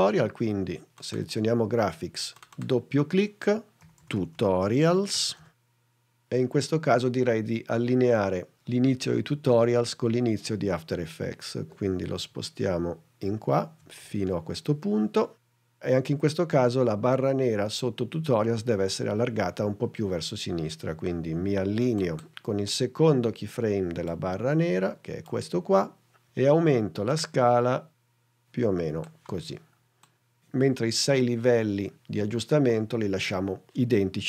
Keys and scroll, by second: 3.6-5.8 typing, 12.4 shift+Left, 13.9 Left.